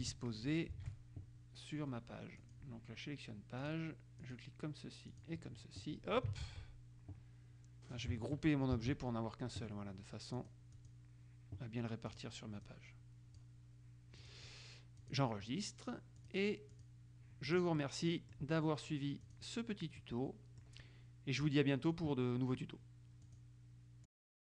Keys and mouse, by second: 0.9 ctrl+shift+a, 2.6 click, 3.8-5.0 drag, 5.2 click, 6.6 ctrl+z, 8.9 ctrl+g, 10.5-11.5 drag, 12.2 click, 14.4 click, 15.2 click, 16.3 click, 17.6 click, 17.9 middle click, 19.4 click, 20.1-21.2 middle drag, 23.4 click, 24.2 click.